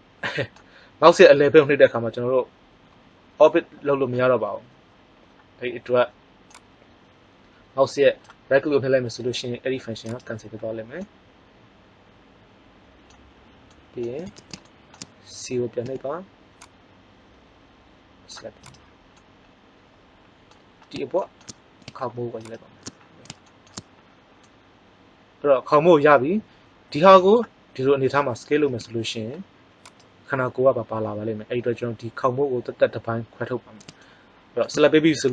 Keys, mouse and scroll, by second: 10.1 right click, 10.6-12.4 middle drag, 15.8 c, 22.3 right click, 22.8 click, 22.9-24.3 middle drag, 28.6 s, 30.0 click.